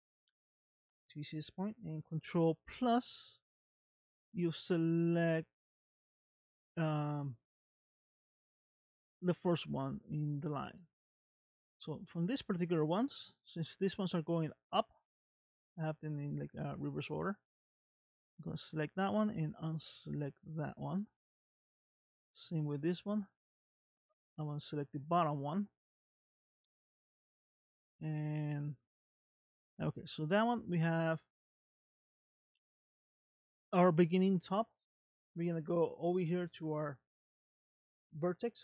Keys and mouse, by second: 2.8 ctrl+KP_Add, 4.7-6.4 middle drag, 7.5 middle click, 9.9 middle click, 10.8 middle click, 15.1 middle click, 18.2 shift+click, 19.7 shift+click, 21.0 middle click, 24.6 shift+click, 25.8-27.2 middle drag, 27.8-30.5 middle drag, 31.3 middle click.